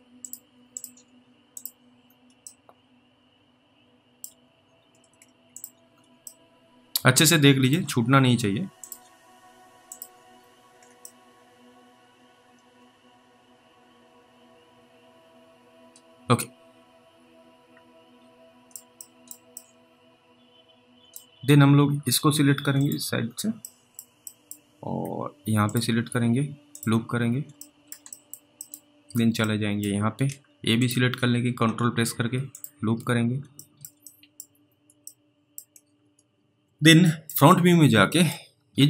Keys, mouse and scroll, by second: 0.2 ctrl+click, 2.0 scroll down 1, 2.7 alt+middle click, 4.5 scroll up 1, 5.6 ctrl+click, 5.9 scroll down 1, 6.5 alt+middle click, 8.0 scroll up 2, 8.8 ctrl+click, 10.3-10.8 scroll down 2, 11.3 alt+middle click, 19.3 middle click, 19.8 middle click, 21.5 scroll up 1, 22.8 ctrl+click, 23.2-23.9 scroll down 2, 23.9 middle click, 24.5 middle click, 24.7-25.1 scroll up 2, 25.7 ctrl+click, 27.1-27.4 scroll down 2, 27.9 alt+middle click, 28.4 middle click, 28.7 middle click, 28.9-29.2 scroll up 3, 29.7 alt+middle click, 30.8 ctrl+click, 33.0-33.4 scroll down 2, 33.9 alt+middle click, 34.3 middle click, 34.5-34.8 scroll down 2, 35.3 alt+middle click, 36.0 alt+w, 36.6 alt+w, 37.3 middle click, 37.5-38.2 scroll up 3, 38.2 middle click, 38.5-38.8 scroll up 3.